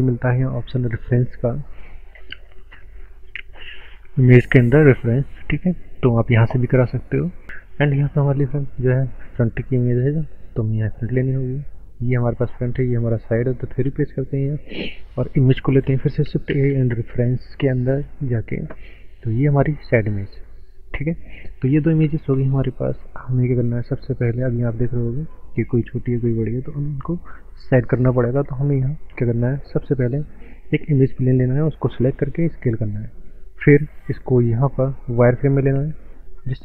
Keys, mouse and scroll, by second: 5.5 click, 10.8 scroll up 5, 12.1 click, 12.1 click, 13.9 KP_3, 15.0 click, 16.7 shift+a, 18.1 click, 22.1-22.8 scroll up 7, 23.1 click, 23.5-23.9 scroll up 2, 23.7 middle click, 23.9 middle click, 27.1 click, 28.8 shift+a, 30.1 click, 32.1 s, 32.9 click, 34.5 z, 35.3 z, 36.0 z, 36.2 click.